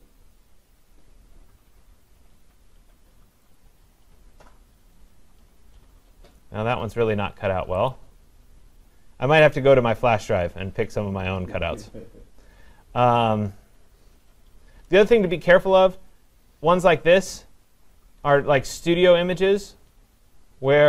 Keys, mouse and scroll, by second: 0.0-0.8 scroll down 1, 0.8-2.4 scroll down 7, 2.4-3.1 scroll up 1, 3.1 scroll up 1, 3.6 click, 4.9 scroll down 1, 5.0-6.3 scroll, 6.3-7.5 scroll, 7.9 click, 8.6-9.3 scroll, 9.3-9.8 scroll down 11, 9.8-10.3 scroll down 2, 10.3-10.9 scroll down 2, 10.9-11.4 scroll down 5, 12.0-12.9 scroll down 1, 13.5-14.1 scroll up 4, 14.1-14.9 scroll up 3, 14.9-16.9 scroll, 16.9 scroll, 17.2 click, 18.5-19.3 scroll, 19.6-20.3 scroll, 20.3-20.6 scroll.